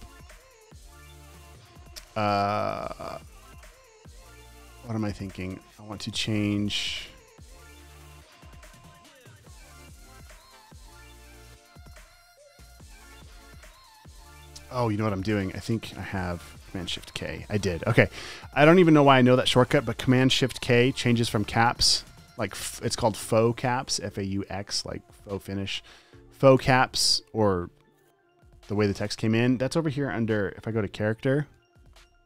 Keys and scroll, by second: 11.1-14.2 typing, 13.1 super+a, 14.5 Escape, 17.3 shift+super+k, 21.0 shift+super+k, 25.1 shift+super+k.